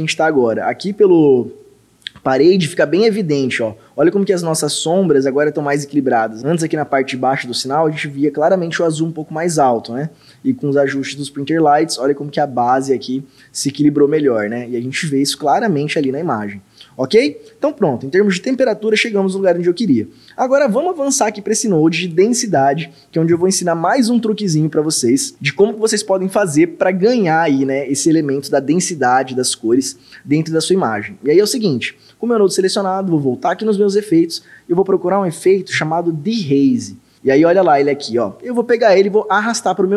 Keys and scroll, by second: 3.0 ctrl+d, 10.3 ctrl+d, 15.5 ctrl+d, 16.1 ctrl+d, 35.2-36.1 typing.